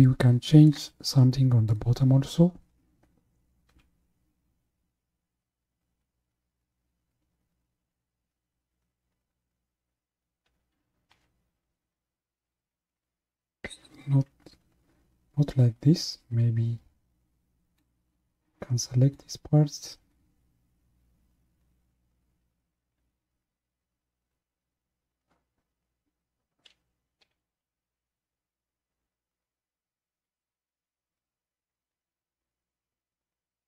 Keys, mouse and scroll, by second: 0.0-1.7 middle drag, 1.7 click, 3.9 KP_1, 10.5 g, 17.8 click, 28.1 g.